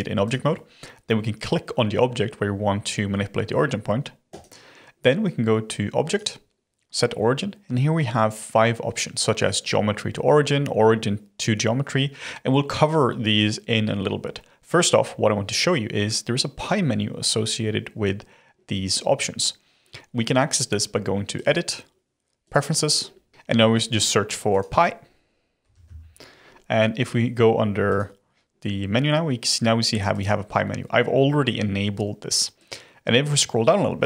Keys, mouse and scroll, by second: 4.2 click, 6.0-9.0 drag, 21.3-23.3 drag.